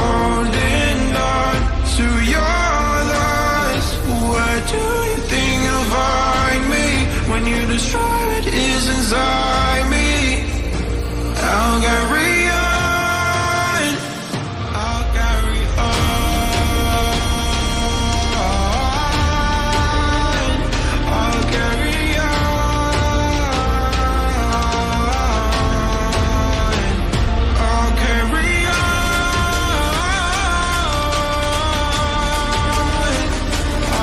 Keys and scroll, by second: 17.7 ctrl+g.